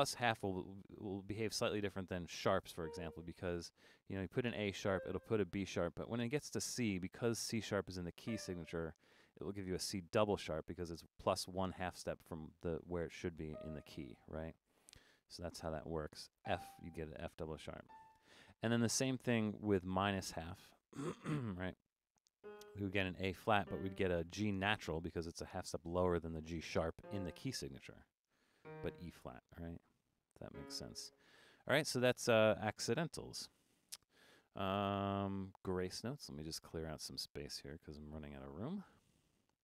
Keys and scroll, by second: 37.7 Escape.